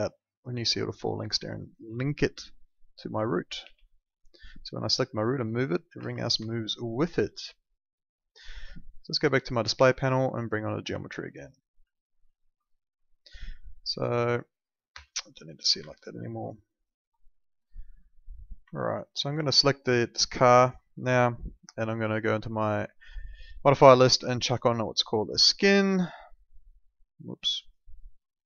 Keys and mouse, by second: 2.0 alt+middle click, 3.6 w, 3.9 click, 6.0 ctrl+z, 6.4 alt+middle click, 8.3 click, 11.0 alt+middle click, 11.4 middle click, 11.9 alt+middle click, 13.1 click, 14.9 F4, 15.8 alt+middle click, 17.1 middle click, 18.8 alt+middle click, 19.9 alt+middle click, 22.1 click, 27.7 click.